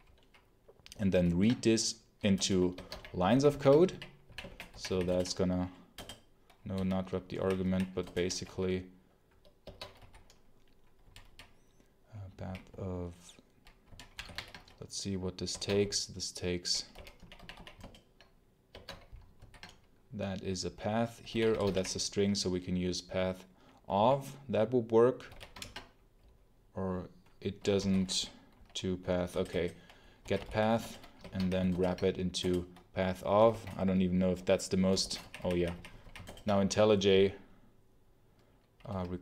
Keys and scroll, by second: 1.1 ctrl+alt+v, 2.2 Return, 2.6 Escape, 2.8-5.1 typing, 3.2 alt+1, 5.8 Return, 6.6 u, 7.2 h, 7.5 h, 7.9 alt+Return, 9.5 Escape, 9.8 b, 10.9-14.0 typing, 14.2 ctrl+p, 15.3-17.5 typing, 17.7 alt+Return, 18.6 Escape, 18.7 l, 19.2 ctrl+b, 20.9-22.0 typing, 23.8 b, 24.9-25.7 typing, 27.4-31.2 typing, 31.1 Escape, 31.6 alt+Return, 32.3 Return, 33.4-35.6 typing, 36.0 alt+h, 36.1 alt+Return.